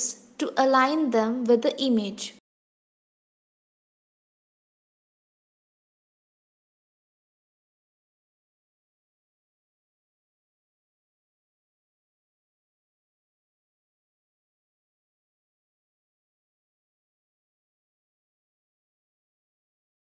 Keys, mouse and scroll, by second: 1.1 click, 2.7 click, 3.8 shift+click, 6.7 g, 10.8-11.9 scroll up 13, 11.9 shift+middle click, 13.5 g, 19.4-20.1 scroll down 15.